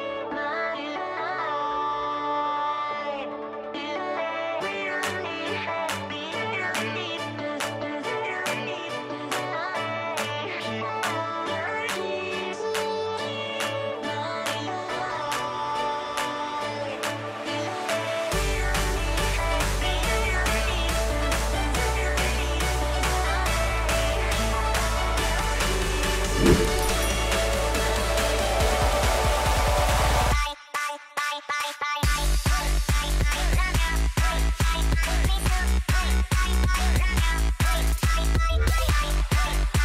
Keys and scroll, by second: 1.8 space, 4.7 space, 8.5 ctrl+y, 11.2 ctrl+space, 11.6 ctrl+g, 11.8 ctrl+r, 12.1 ctrl+a, 31.6 space, 35.1 space, 38.7 Delete.